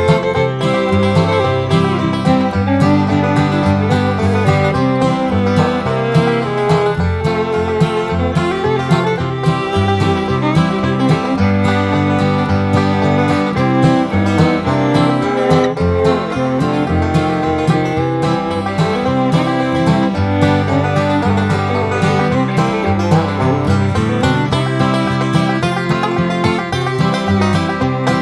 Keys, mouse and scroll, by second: 2.3 click, 4.4 click, 5.9 click, 8.7 click, 10.2 click, 11.7 click, 14.7 click, 16.2 click, 17.1 1, 17.4 2, 18.6 click, 19.7 click, 21.5 click, 22.0-27.9 drag, 28.0 0.